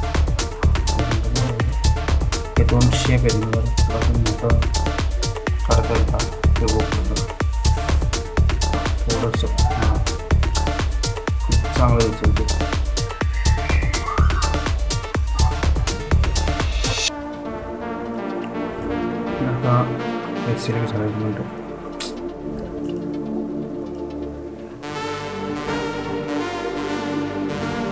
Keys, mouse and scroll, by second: 0.0 Down, 1.9 Down, 2.9 Up, 5.0 click, 5.7-6.9 scroll down 1, 7.0 ctrl+click, 8.0 ctrl+t, 9.3-27.9 drag.